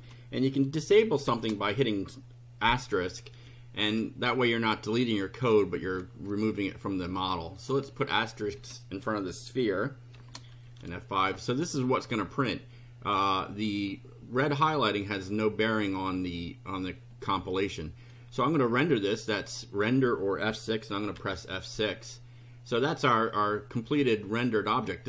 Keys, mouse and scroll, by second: 1.2 shift+8, 3.3 F5, 4.0 scroll down 2, 5.5 shift+right click, 7.5 click, 8.5 BackSpace, 10.1 shift+8, 10.7 F5, 12.0 click, 21.1 F6.